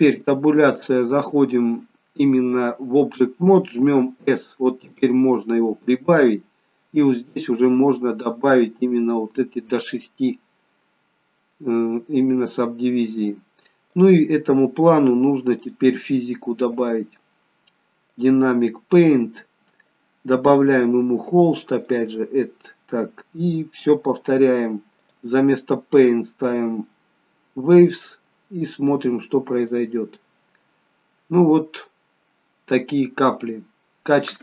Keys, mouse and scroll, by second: 0.0 Tab, 4.0 s, 5.2-6.8 scroll down 6, 7.3 click, 7.6 click, 8.2 click, 10.8 middle click, 12.0-12.8 scroll up 2, 12.8-13.3 scroll up 1, 13.3 middle click, 14.2 click, 15.6 click, 16.9 click, 18.1 click, 18.7-21.2 scroll down 2, 21.2-21.8 scroll down 3, 22.7 click, 22.7-25.0 scroll down 8, 25.0 click, 25.0-26.0 scroll down 1, 27.9-29.2 scroll down 1, 29.7 click, 30.9-31.3 scroll up 2.